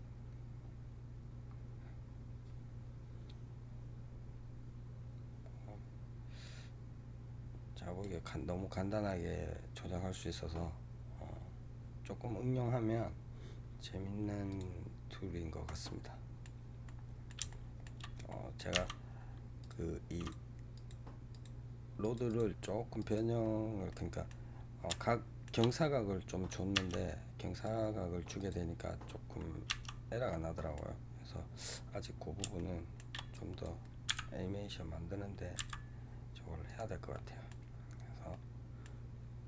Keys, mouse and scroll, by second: 6.4-9.3 drag, 14.4 click, 15.5-18.6 middle drag, 18.6 Tab, 19.5 click, 20.1 click, 20.6 click, 21.2 click, 21.9 click, 22.1 click, 22.9 click, 23.8-25.8 middle drag, 25.8 scroll up 2, 26.7 Tab, 27.4 click, 28.3 click, 29.6 Tab, 30.2-32.1 middle drag, 32.1-32.4 scroll down 1, 32.4 shift+middle click, 33.2 click, 34.0 g, 37.0 middle click, 37.6-38.1 scroll down 2, 38.2-39.4 middle drag.